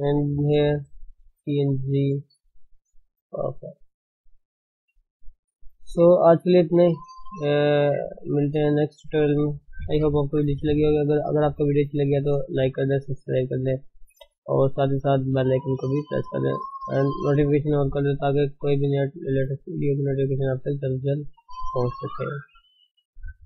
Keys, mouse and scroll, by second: 0.0 click, 0.5 g, 2.6 scroll down 1, 6.2-6.8 scroll down 6, 6.3 Tab, 6.6-9.9 middle drag, 9.9 KP_1, 10.2-10.8 scroll up 2, 10.8-14.8 shift+middle drag, 14.8-15.5 scroll up 1, 15.5-18.3 scroll up 2, 18.3-19.1 shift+middle drag, 19.1-19.6 scroll up 3, 20.3 shift+middle click, 20.6-21.8 scroll up 3, 21.8-23.3 shift+middle drag, 23.3 click.